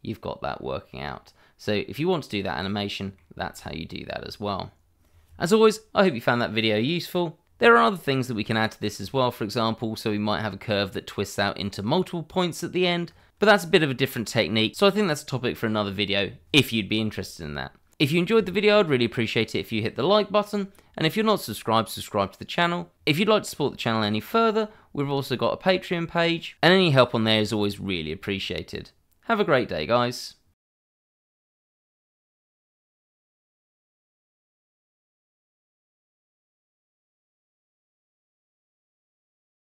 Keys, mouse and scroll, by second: 0.7-2.3 scroll down 1, 2.9 middle click, 3.7-5.7 scroll up 1.